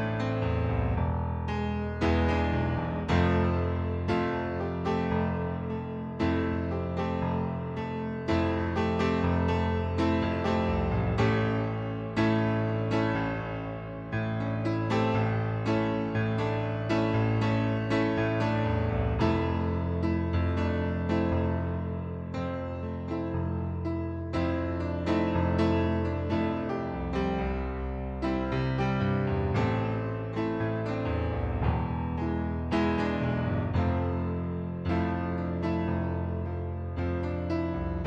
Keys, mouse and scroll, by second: 3.0 click, 3.8 click, 5.3 click, 7.8 click, 8.8 click, 9.7 right click, 11.1 middle click, 12.1 middle click, 14.6 click, 15.4 click, 21.6 click, 22.4 click, 23.5 click, 24.8 right click, 26.1 click, 28.1 right click, 29.0 middle click, 29.8 ctrl+d, 31.2 click, 32.7 click, 36.5 click, 37.6 click.